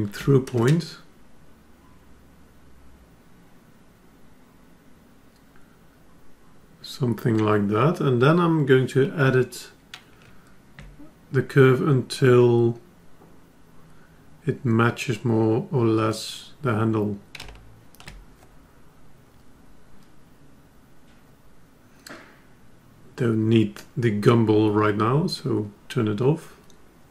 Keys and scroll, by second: 9.6 F10.